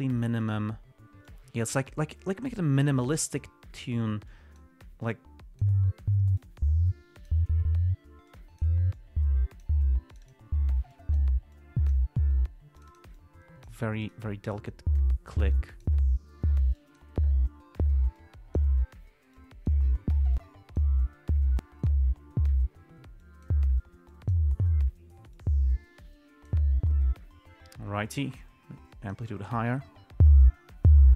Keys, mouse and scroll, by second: 0.6 click, 1.6-3.9 drag, 4.6-5.1 drag, 5.4-6.1 drag, 6.7 click, 8.6 click, 9.3-10.1 drag, 10.4 click, 11.2-11.7 drag, 11.9 click, 13.1-14.2 drag, 14.4 right click, 15.9 click, 17.1 click, 18.5 click, 19.7-20.2 drag, 20.7 click, 21.9 click, 23.5 click, 24.4 click, 25.7 click, 28.7-29.7 drag.